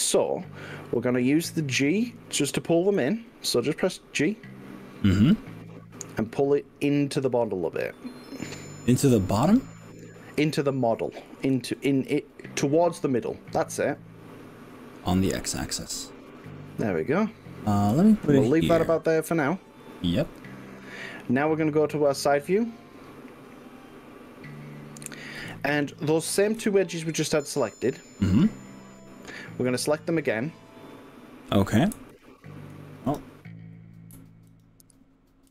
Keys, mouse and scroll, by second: 3.0 g, 11.5 x, 19.9 click, 20.4 click, 22.1-24.5 middle drag, 25.4 KP_1, 26.6 KP_3, 32.1 alt+click, 33.1 drag, 34.5 alt+click.